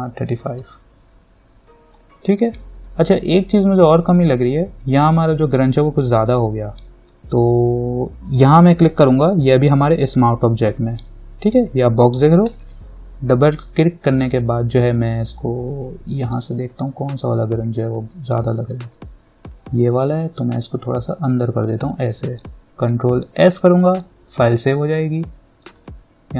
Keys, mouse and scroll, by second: 0.5-1.3 typing, 1.8 click, 4.4 click, 7.1 scroll down 1, 9.7 click, 12.6-23.6 drag, 23.6 ctrl+s, 26.0 click.